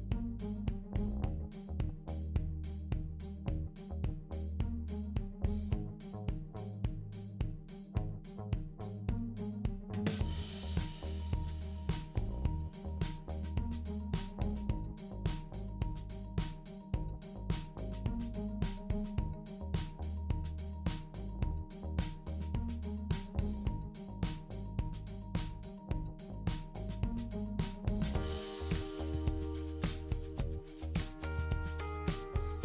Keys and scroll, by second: 6.0-6.8 typing, 9.4-10.1 typing, 14.9-15.6 typing, 29.5 super+c, 30.4 super+v, 31.7 super+v.